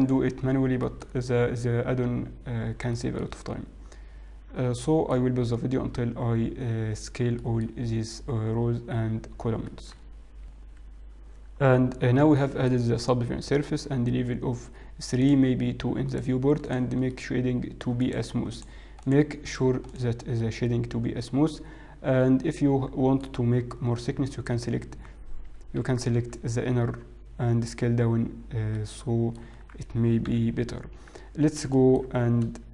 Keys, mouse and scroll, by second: 0.0 scroll down 3, 0.5 scroll down 2, 0.9 shift+middle click, 3.2 shift+middle click, 4.4 scroll down 1, 5.1 shift+middle click, 7.6 shift+middle click, 8.0-9.1 scroll up 2, 9.1-9.4 scroll down 2, 9.6 shift+middle click, 10.6 Tab, 10.6 middle click, 10.6-11.9 scroll down 2, 12.6 middle click, 15.1 click, 17.2 right click, 17.2 middle click, 17.9 right click, 18.9 click, 19.4 right click, 20.3 middle click, 23.2-24.0 scroll up 4, 24.0-26.6 scroll down 4.